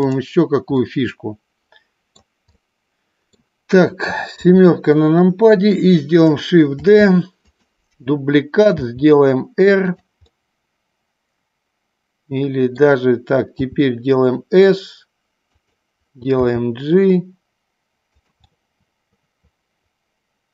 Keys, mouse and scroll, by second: 0.9-2.2 middle drag, 2.6-3.4 middle drag, 4.4 KP_7, 6.9 shift+d, 8.8 r, 10.4-12.9 middle drag, 13.7 s, 15.6 click, 16.4 g, 18.3 click, 18.5-20.5 middle drag.